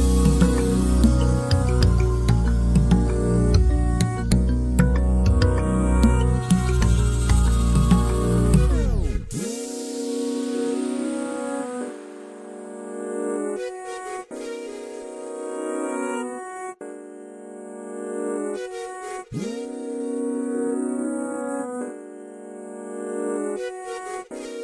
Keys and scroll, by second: 2.4 f, 3.8-4.9 typing, 6.9-7.8 typing, 9.7 Delete, 10.3-11.0 typing, 12.1-13.5 typing, 14.7 m, 18.0 space.